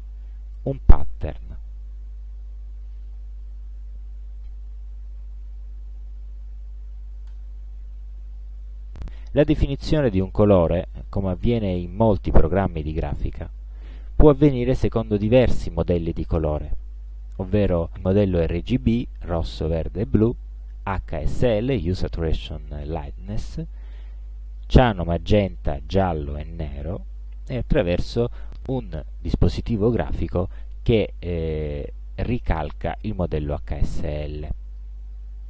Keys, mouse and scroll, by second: 0.6 click, 7.3 click, 17.9 click, 20.9 click, 24.6 click, 27.8 click, 30.7-31.6 drag, 32.2-33.6 drag, 34.2 click.